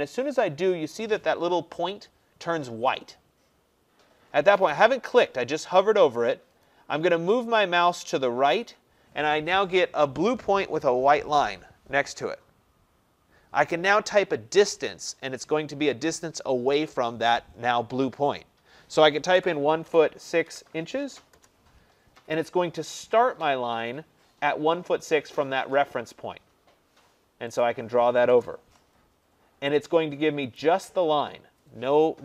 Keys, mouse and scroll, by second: 19.4-21.6 typing, 27.6 click, 28.4 Return, 30.6 click.